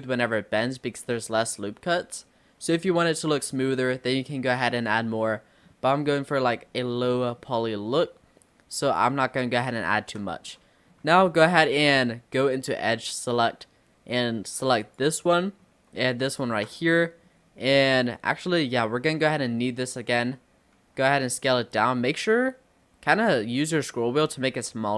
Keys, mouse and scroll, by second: 1.3-2.8 scroll down 1, 2.8 click, 4.2 click, 4.8 click, 5.3 middle click, 6.2-7.1 scroll up 3, 7.1 middle click, 7.5-7.9 scroll up 1, 9.0 click, 10.5 middle click, 11.3-11.9 scroll up 2, 14.9 click, 15.4 middle click, 16.3 shift+click, 16.9-19.8 middle drag, 19.8 click, 20.8 s.